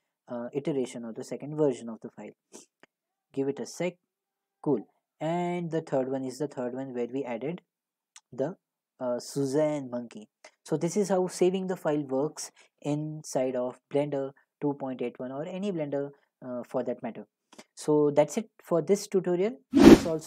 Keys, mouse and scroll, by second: 6.7 click, 8.0 click, 19.5 click.